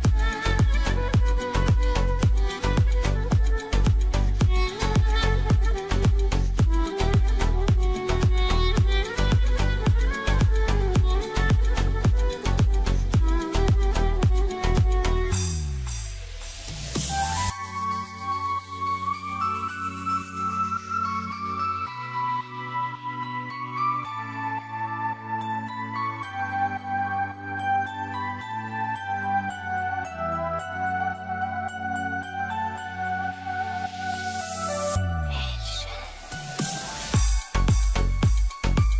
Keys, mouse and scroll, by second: 1.7-5.7 drag, 9.3 click, 10.5 click, 12.3 click, 14.0 click, 14.9 click, 18.8 click, 19.8 click, 22.8 click, 25.3-33.2 drag, 33.6 click, 34.5 ctrl+z, 35.1 ctrl+j, 36.1 click, 37.6-38.9 drag.